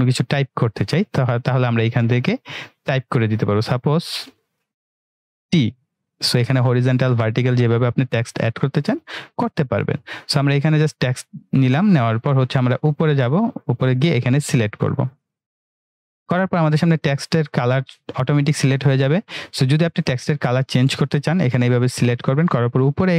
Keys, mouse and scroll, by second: 4.6 click, 10.6 click, 13.0-19.0 drag.